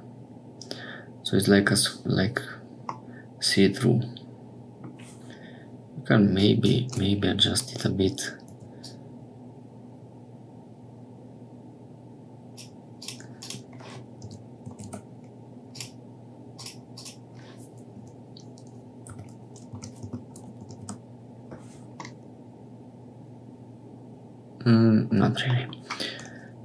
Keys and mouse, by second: 2.9-4.8 middle drag, 6.3 click, 7.5-8.6 drag, 8.8-12.5 drag, 12.9-21.5 drag, 22.1-25.1 middle drag, 25.6 middle click.